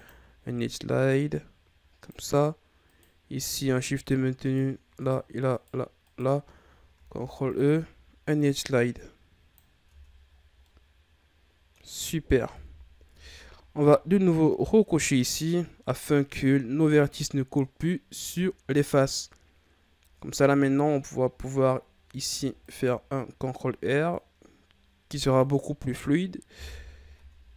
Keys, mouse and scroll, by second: 2.8 right click, 3.4 shift+right click, 3.9 shift+right click, 4.4 shift+right click, 4.9 shift+right click, 5.4 shift+right click, 6.0 shift+right click, 6.9 ctrl+e, 9.9 Tab, 10.2-10.6 scroll down 6, 10.6-12.5 middle drag, 12.5 KP_3, 13.1 Tab, 15.3 click, 16.4-16.9 ctrl+scroll down 2, 16.9-17.9 scroll up 3, 17.9-18.3 scroll down 3, 18.3-20.1 shift+scroll up 5, 20.1-22.0 ctrl+scroll down 1, 22.0 ctrl+r, 26.7 KP_1, 27.1 Tab.